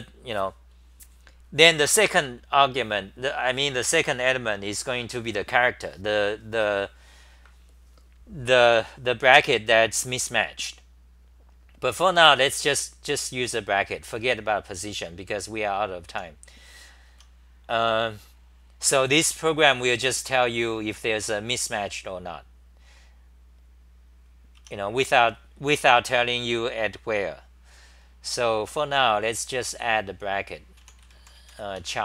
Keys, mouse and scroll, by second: 16.1 u, 17.1 Home, 31.8 Home, 31.8 u.